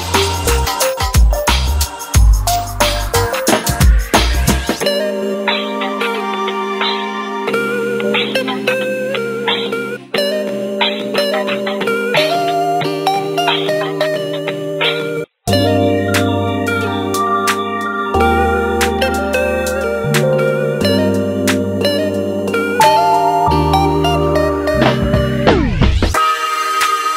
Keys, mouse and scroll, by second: 1.1 click, 1.6 g, 4.7 ctrl+r, 7.7 ctrl+r, 9.6 2, 10.4 ctrl+z, 10.6 ctrl+z, 10.9 ctrl+z, 11.4 click, 11.7 alt+shift+click, 12.1-13.4 middle drag, 13.4 g, 17.0 KP_3, 17.7 scroll down 3, 17.9 shift+middle click, 18.3 alt+z, 19.0 alt+z, 19.4 scroll up 1, 19.7-22.8 shift+middle drag, 23.5 g, 25.4-26.8 ctrl+drag, 26.8 ctrl+z.